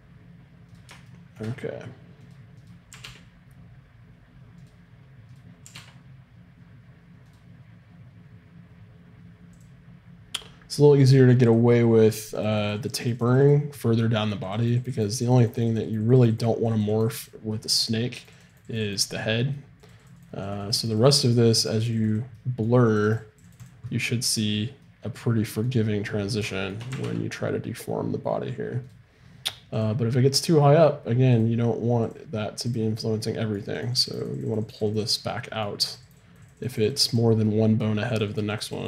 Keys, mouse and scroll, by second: 2.2-4.4 right drag, 2.9 r, 5.4-7.3 right drag, 12.4-24.5 drag, 25.7-27.0 middle drag, 26.9 r, 30.1-31.6 drag, 32.1-35.6 drag.